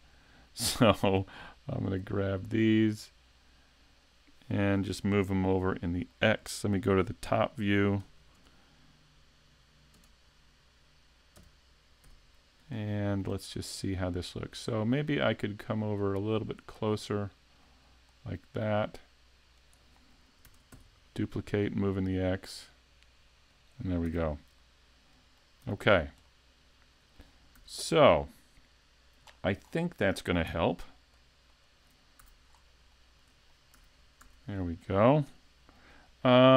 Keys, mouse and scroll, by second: 1.0 right click, 1.9 shift+right click, 2.7 right click, 4.0 right click, 5.7 middle click, 10.0 KP_7, 11.4 KP_5, 12.2 z, 12.7 shift+scroll up 1, 12.9 shift+middle click, 13.4-14.6 scroll up 3, 15.0 click, 17.6 click, 20.5 shift+d, 23.6 click, 24.1 a, 24.6 middle click, 25.7 z, 25.8-26.3 scroll down 4, 26.3 middle click, 27.6 a, 29.2-29.7 scroll down 8, 31.1 alt+click, 31.5 alt+click, 32.2 a, 32.5-33.1 scroll down 2, 33.1 shift+middle click, 33.5 middle click, 33.8 a, 34.2 a, 34.5 middle click, 35.3 KP_5, 36.1 shift+middle click, 36.5 scroll up 1.